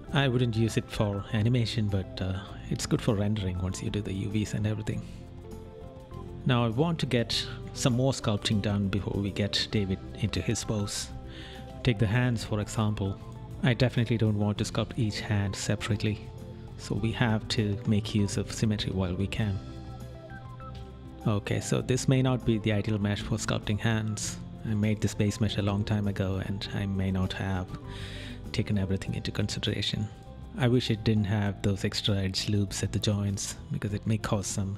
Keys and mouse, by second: 26.9 right click.